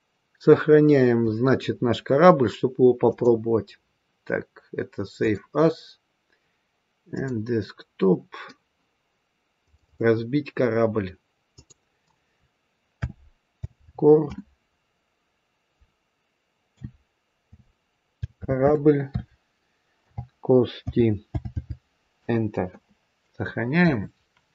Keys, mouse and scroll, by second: 3.0 click.